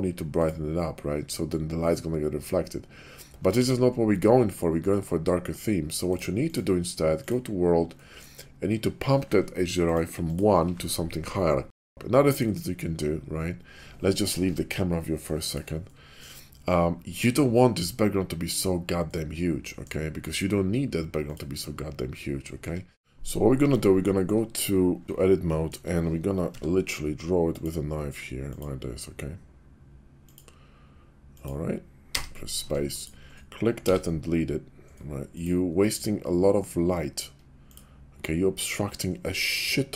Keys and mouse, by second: 3.7 ctrl+z, 6.8-8.7 drag, 9.7-11.9 drag, 14.4 Page_Down, 15.8-16.3 middle drag, 19.0-19.9 middle drag, 21.2 click, 22.6 Tab, 23.1 Tab, 23.7 Tab, 25.5 shift+click, 27.3 k, 32.6 Tab, 32.9 click, 33.7 x, 37.5 Tab, 38.3-39.9 middle drag.